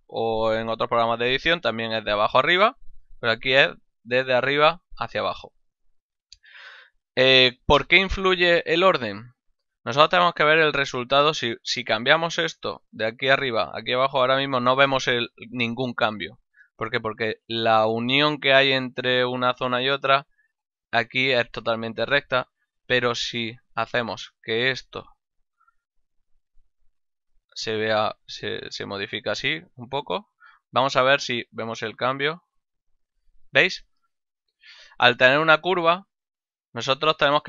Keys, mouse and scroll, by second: 9.5 middle click, 10.1 middle click, 10.7 middle click, 12.3 click, 14.0 click, 20.0 middle click, 22.8 Tab, 24.1 alt+right click, 24.7 ctrl+middle click, 25.1 shift+middle click, 26.0 s, 27.2 click, 29.3 alt+right click, 30.4 Tab, 32.2 click, 34.2 click, 35.0 ctrl+middle click, 35.8 shift+middle click, 36.2 ctrl+middle click.